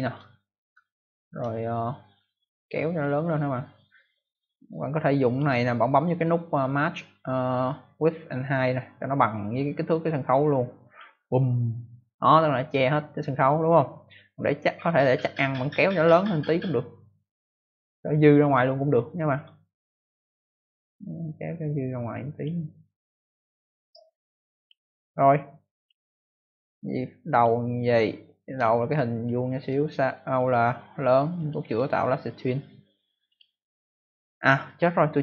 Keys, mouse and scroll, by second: 0.8-1.7 ctrl+alt+scroll down 1, 5.1 click, 10.8 click, 15.8 click, 25.8 click, 27.2 click, 28.6 ctrl+alt+scroll up 1, 29.2 ctrl+alt+scroll down 1, 30.3 click, 30.3 scroll down 1, 31.3 click, 31.6 right click, 33.2 click, 34.6 click.